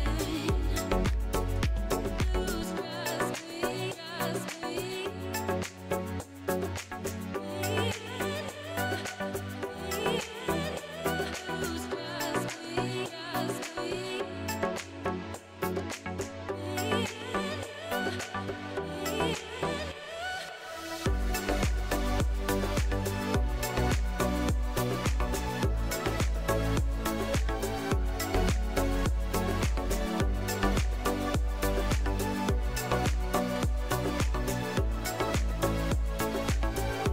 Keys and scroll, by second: 0.5 Tab, 6.9 Tab, 15.5 Tab, 22.7 ctrl+b, 25.4 Tab, 32.3 KP_7, 32.8 shift+z, 35.1 Tab, 35.8 shift+z.